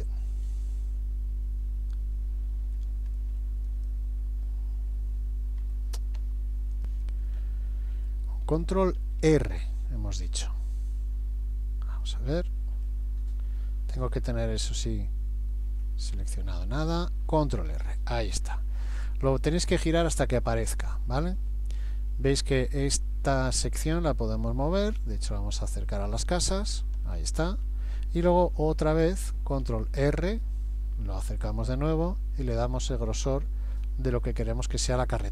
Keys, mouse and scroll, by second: 0.4-1.8 scroll up 2, 3.1 ctrl+r, 3.1 scroll up 2, 5.6 Escape, 12.1 middle click, 16.9 ctrl+r, 27.1 scroll up 1, 27.6-28.4 scroll down 1, 29.6 ctrl+r, 29.6 scroll down 1.